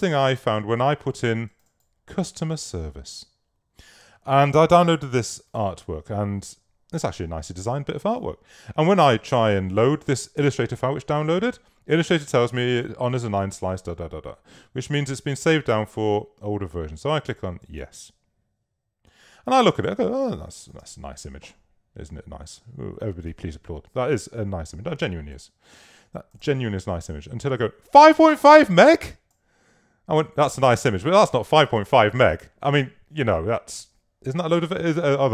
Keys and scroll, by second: 19.8 space.